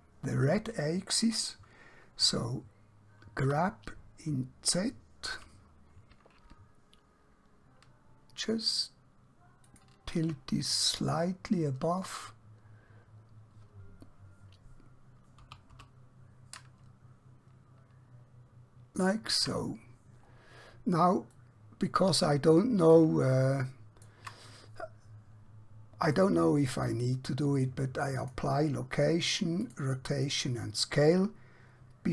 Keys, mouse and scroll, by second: 3.5 g, 9.7 shift+click, 11.1-11.5 scroll up 1, 15.4 g, 19.1 shift+click, 19.9-20.4 scroll down 1, 21.4 middle click, 23.4 shift+middle click, 26.0 click.